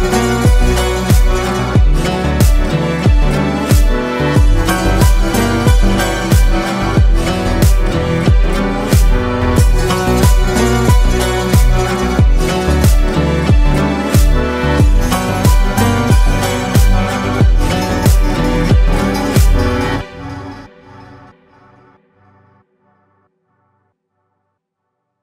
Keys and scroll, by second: 1.7 ctrl+space, 2.6 ctrl+space, 5.7 ctrl+g, 9.9 ctrl+space, 12.0 ctrl+space.